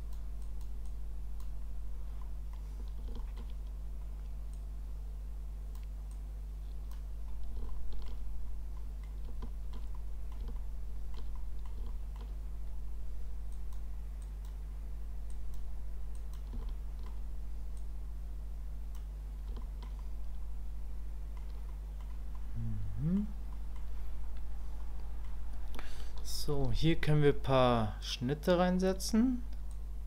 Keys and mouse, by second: 0.4 click, 0.8 click, 2.2 click, 3.2 shift+middle click, 4.5-5.8 drag, 6.1 click, 7.7 shift+middle click, 8.8 middle click, 9.4 shift+click, 9.9 middle click, 10.6 shift+click, 11.3 middle click, 11.9 shift+middle click, 13.5 click, 14.2 click, 15.3 click, 16.1 click, 16.6 shift+click, 17.8-18.9 drag, 19.6 shift+click, 20.0-21.4 middle drag, 21.7 middle click, 22.4 middle click, 23.5 middle click, 24.8 middle click, 29.7 click.